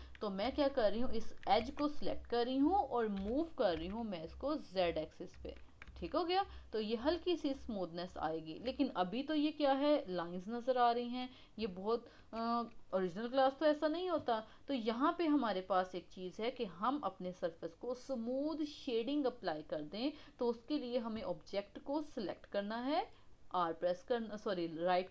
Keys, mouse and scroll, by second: 0.4 Tab, 1.6 KP_1, 3.1 g, 5.9 Tab, 6.2-7.0 middle drag, 7.0-7.3 scroll down 3, 7.3-10.4 middle drag, 10.8 scroll up 2, 11.3 scroll down 2, 11.8-15.9 shift+middle drag.